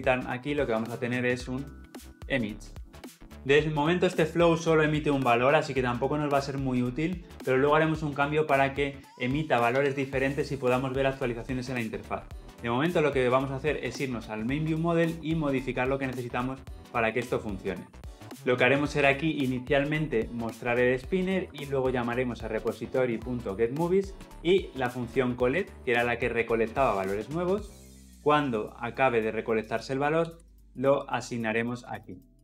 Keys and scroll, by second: 22.1 Return, 30.1 ctrl+c, 30.8 ctrl+v, 32.3 Escape.